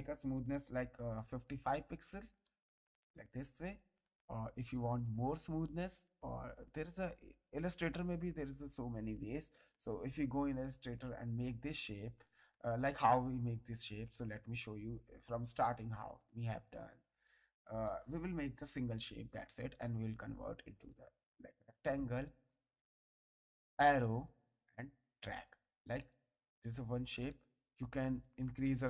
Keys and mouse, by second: 1.3 KP_5, 2.3 Return, 2.3 KP_Enter, 4.6 click, 10.1 click, 13.0 ctrl+z, 17.2 ctrl+click, 18.3 Delete, 19.7 click, 20.9 click, 23.6 click, 24.7 click, 25.9 click, 27.2 click, 28.6 click.